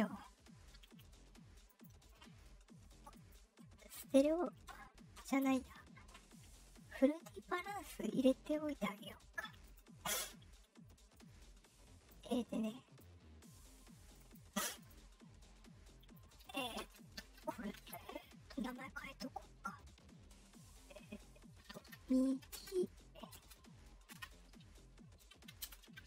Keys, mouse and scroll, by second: 0.8 right click, 1.6 click, 3.1 click, 9.6 click, 11.1 click, 12.6 click, 14.1 click, 14.7 click, 16.1 scroll down 1, 21.5-23.3 typing, 25.5-26.0 typing.